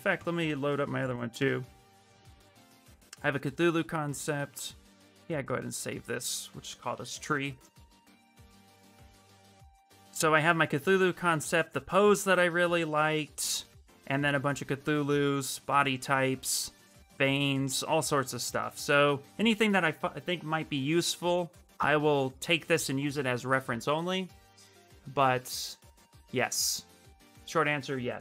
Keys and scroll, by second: 6.3-7.4 typing.